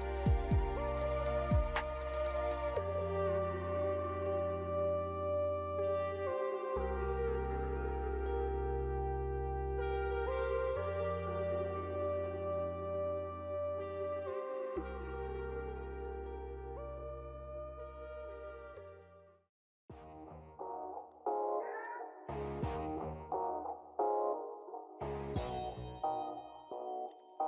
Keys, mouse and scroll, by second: 0.1 click, 0.4 click, 0.6 click, 1.1 click, 1.3 click, 1.5 click, 4.1 click, 4.5 click, 6.0 click, 8.3 shift+middle click, 8.4 ctrl+middle click, 8.6 shift+middle click, 9.5 shift+d, 13.0 click, 13.7 click, 15.2 0, 17.6 click, 18.4 click, 19.9 click, 21.1 shift+middle click, 21.6 ctrl+middle click, 22.2 middle click, 22.4 shift+middle click, 22.7 ctrl+middle click, 23.0 middle click, 23.5 space, 27.2 space.